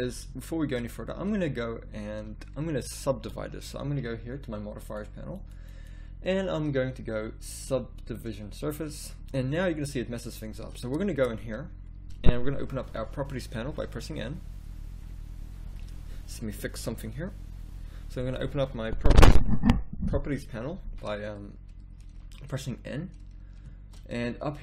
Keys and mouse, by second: 2.5 z, 3.1 z, 11.1 Tab, 12.8 n.